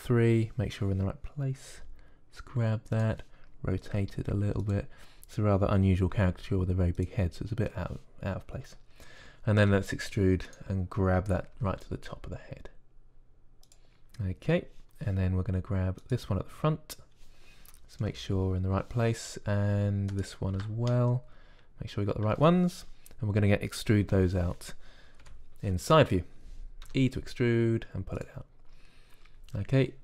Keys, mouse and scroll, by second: 0.7 KP_3, 2.6 g, 4.7 r, 6.9 g, 10.5 e, 12.4 g, 17.0-18.9 drag, 18.9 KP_1, 21.0-23.1 drag, 24.9 KP_1, 26.1 KP_3, 27.7 e.